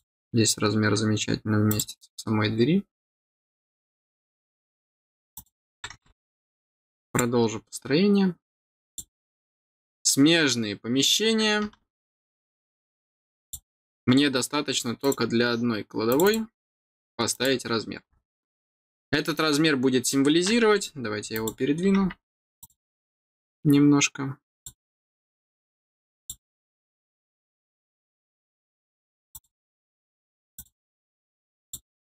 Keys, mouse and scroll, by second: 1.6 click, 2.9 click, 4.3 middle click, 5.2 click, 7.0 click, 8.8 click, 13.3 click, 14.9 click, 16.0 click, 17.2 click, 18.0 middle click, 21.2 click, 22.5 click, 24.5 click, 26.1 click, 29.2 click, 30.5 click, 31.5 click.